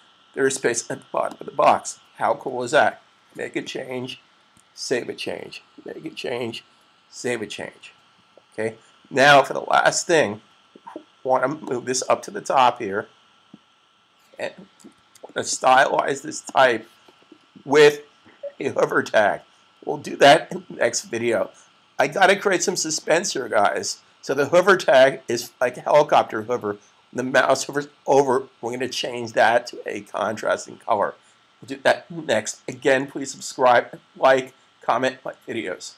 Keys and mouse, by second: 4.3 super+s, 11.8 click, 14.8 super+s, 16.3 click, 19.1 typing.